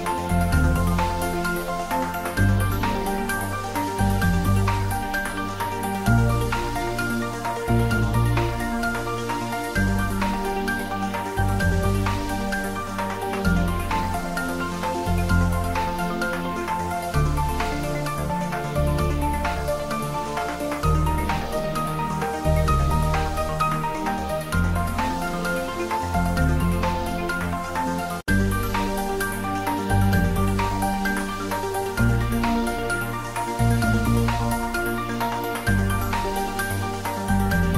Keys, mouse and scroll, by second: 0.8 scroll down 1, 1.0 middle click, 2.0 Tab, 2.2 middle click, 2.4 scroll up 1, 2.7 shift+z, 3.1 click, 3.5 shift+z, 3.9 click, 4.2 scroll down 1, 4.7 scroll up 1, 5.0-5.6 scroll down 1, 5.8 click, 6.9 shift+z, 7.4 middle click, 7.6 click, 8.1 Tab, 8.4 middle click, 9.0 shift+z, 9.3-9.6 scroll down 1, 9.6 Tab, 10.1 scroll up 1, 10.3 middle click, 11.2-12.0 scroll down 1, 12.0 click, 14.1 click, 14.7 scroll up 1, 17.2-17.6 scroll down 1, 17.6 middle click, 18.3 shift+z, 20.4 click, 22.6 z, 24.2 click, 25.2 shift+z, 25.5 click, 26.0 shift+z, 26.3-27.0 scroll down 1, 27.0 middle click, 27.8 alt+h, 29.4 scroll up 1, 29.9 Tab, 30.4-30.9 scroll up 1, 31.3 shift+z, 32.3 click, 32.8 Tab, 33.6 middle click, 34.5 alt+h, 35.2 Tab, 35.8 shift+z, 36.0 click, 36.2 Tab, 36.6 scroll down 1, 36.8 click.